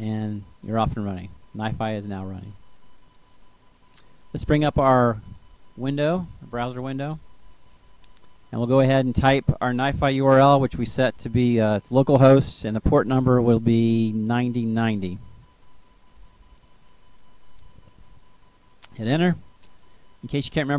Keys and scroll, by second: 10.8 h, 11.1 t, 12.3-16.4 typing.